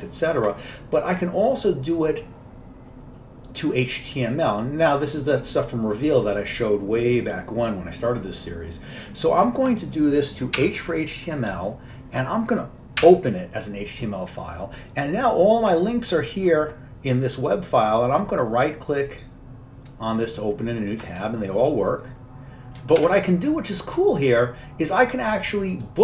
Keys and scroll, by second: 10.7 typing, 13.8-14.6 typing, 23.1 ctrl+w.